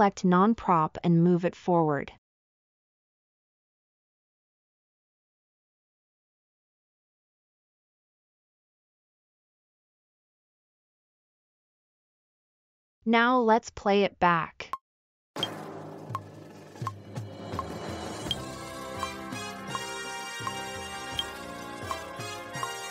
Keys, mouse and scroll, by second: 3.6 g, 3.7 g, 10.0 scroll up 2, 11.0-11.3 middle drag, 12.1 middle drag.